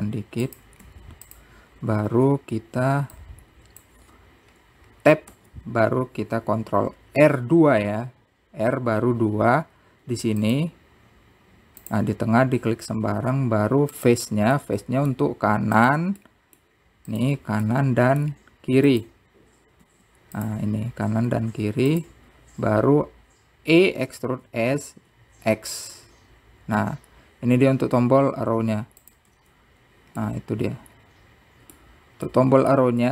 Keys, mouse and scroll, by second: 0.0-0.6 scroll up 3, 0.9 click, 1.8-3.1 scroll up 2, 3.1 b, 5.1 r, 14.0 middle click, 14.8 t, 15.4-16.6 middle drag, 19.0 `, 27.0 Tab, 27.9-32.0 middle drag.